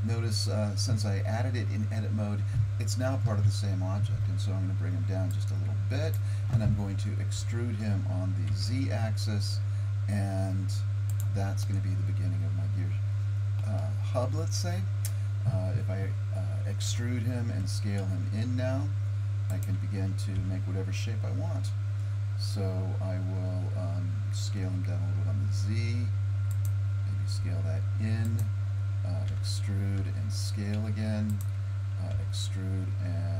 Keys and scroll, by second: 3.3 KP_1, 7.4 e, 16.9 e, 20.4 e, 27.4 s, 29.3 e, 32.1 e.